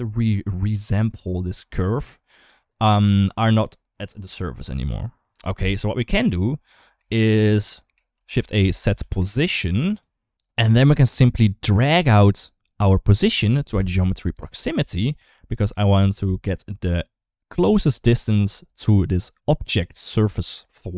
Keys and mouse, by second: 0.0 middle click, 0.5 middle click, 2.9 drag, 3.1 click, 5.4 g, 6.9 shift+middle click, 7.9 shift+a, 10.1 ctrl+x, 11.8 middle click, 12.9-15.5 drag, 16.1 shift+middle click.